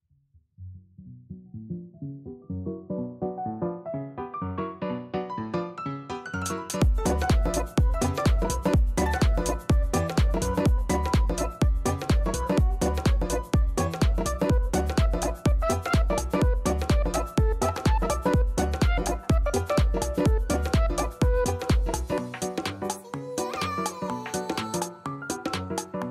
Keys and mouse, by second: 2.8 click, 6.4 click, 6.7 click, 10.6 alt+click, 11.4 alt+middle click, 11.9 alt+middle click, 12.1 alt+click, 12.9 alt+click, 13.1 alt+middle click, 13.4 alt+click, 13.6 alt+middle click, 13.8 alt+right click, 14.3 alt+middle click, 14.7-16.1 alt+drag, 21.0 click, 21.7 click, 22.0 click, 24.2 click.